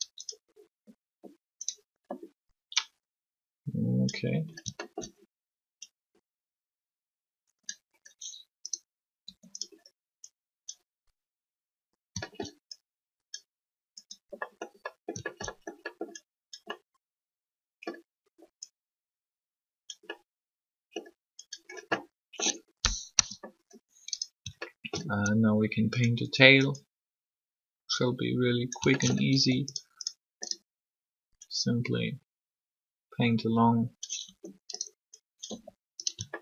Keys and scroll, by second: 9.2 r, 22.9 3, 29.3 alt+shift+r, 34.2 r.